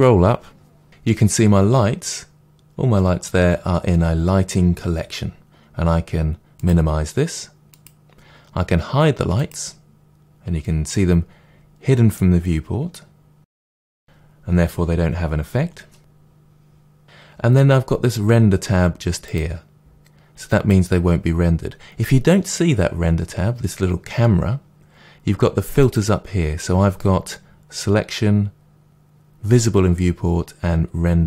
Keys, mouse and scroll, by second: 9.4 click, 19.3 click, 20.5 click, 25.8-31.2 drag.